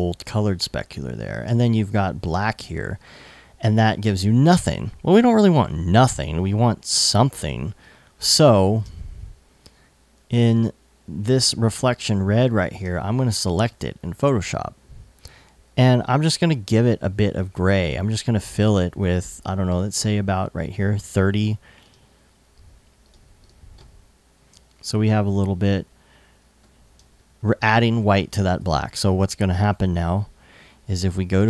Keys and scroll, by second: 1.9 super+Tab, 8.4 alt+super+Tab, 9.2 super+Tab, 25.9 super+d, 26.5 super+s, 28.2 super+Tab.